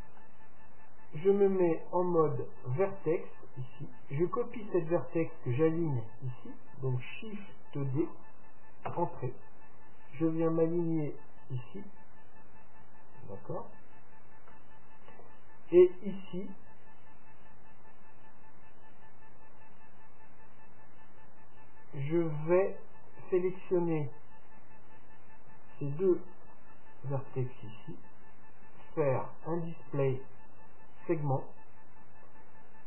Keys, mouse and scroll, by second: 0.1 scroll up 1, 0.2 Tab, 2.6-4.4 drag, 4.3-6.2 right drag, 8.0 shift+d, 10.2-12.1 drag, 14.1-14.6 scroll down 1, 14.6-16.5 middle drag, 23.1-25.0 right drag, 26.5-28.5 right drag, 27.5-29.5 middle drag, 30.2-32.8 drag.